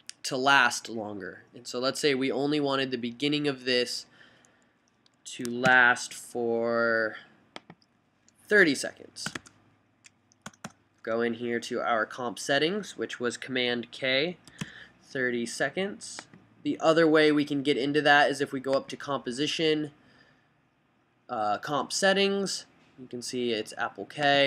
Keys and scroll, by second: 5.9 super+k, 9.5 BackSpace, 9.5 3, 10.7 BackSpace, 10.8 BackSpace, 14.5-15.3 typing.